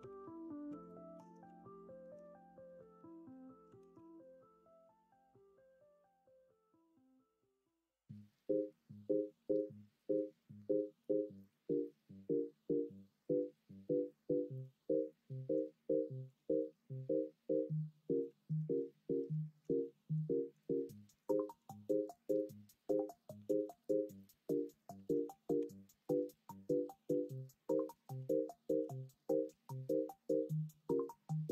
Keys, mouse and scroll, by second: 0.0 2, 3.7 ctrl+b, 23.4 g, 25.0 ctrl+z, 25.6 o, 26.9 s, 28.1 ctrl+z, 28.7 g.